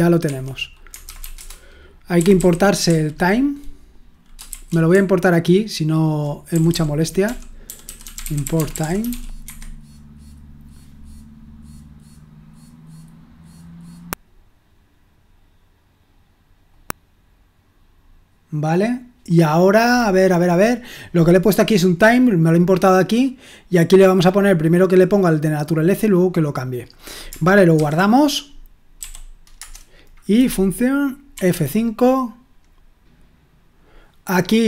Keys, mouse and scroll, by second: 0.2 Escape, 0.8-2.8 typing, 4.3-9.9 typing, 13.9 click, 16.6 click, 26.1 click, 26.8 click, 28.7-29.5 typing, 31.3 F5.